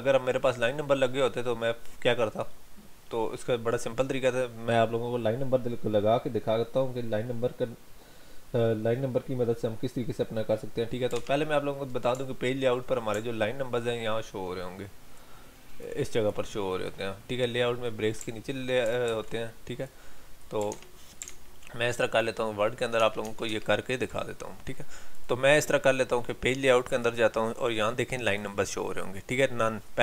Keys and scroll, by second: 11.2 alt+Tab, 19.1 ctrl+z, 20.7 alt+Tab.